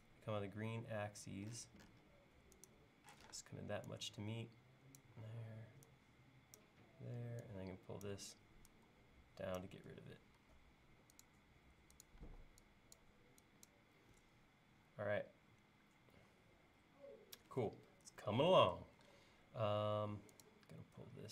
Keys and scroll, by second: 3.2 p, 10.4 l, 12.2 e, 19.0 l.